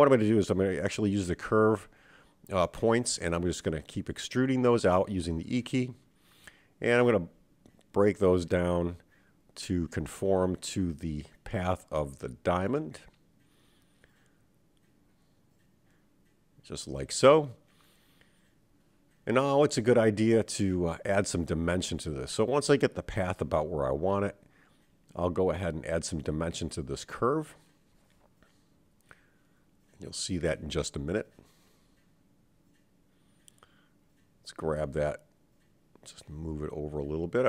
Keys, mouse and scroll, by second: 0.1 g, 1.4 click, 1.9 g, 5.6 e, 8.4 e, 10.4 e, 14.0 e, 17.6 click, 18.7 g, 20.3 click, 20.6 g, 22.0 click, 22.4 g, 25.9-28.8 middle drag, 29.2-30.4 scroll up 3, 30.4 Tab, 30.9-32.8 middle drag, 33.9 Tab, 35.0 click, 35.9 KP_7, 37.0-37.4 scroll up 3.